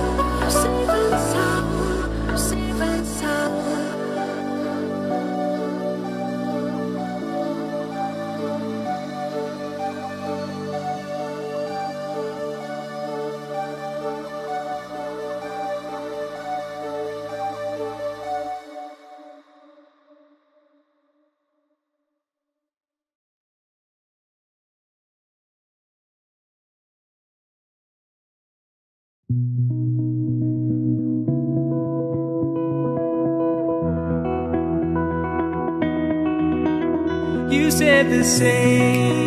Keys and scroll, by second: 21.4 ctrl+u, 36.8 ctrl+j.